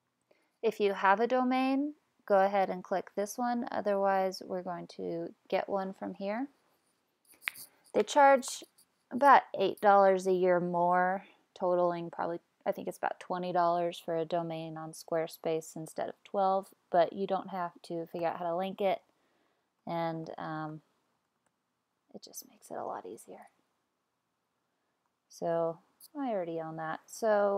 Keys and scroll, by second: 18.0-21.9 typing.